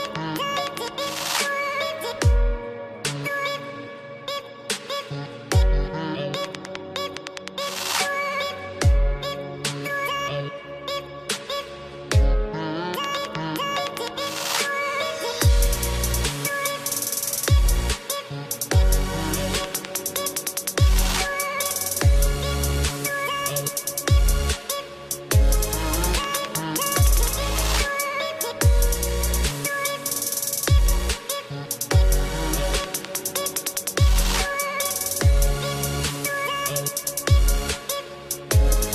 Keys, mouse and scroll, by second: 3.6 ctrl+click, 4.6 ctrl+c, 5.0 click, 5.5 ctrl+v, 6.3 click, 6.8 BackSpace, 7.5 click, 8.0 Delete, 8.5 click, 9.7 click, 11.6 click, 13.8 click, 14.5 click, 16.0 click, 17.0 click, 18.0 click, 18.8 click, 19.8 Delete, 20.3 click, 21.4 Delete, 22.7 click, 23.5 click, 31.4 click, 38.3 click.